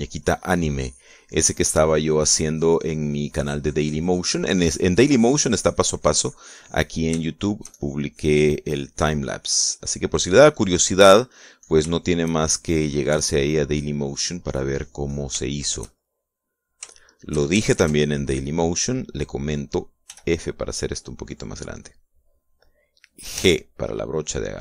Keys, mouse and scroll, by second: 7.9 shift+middle click, 9.1-12.6 shift+drag, 13.1-16.1 shift+drag, 16.1 shift+middle click, 16.9 shift+middle click, 17.7 shift+middle click, 18.5 ctrl+s, 18.7 ctrl+click, 20.8 f, 23.1 click, 24.1 g.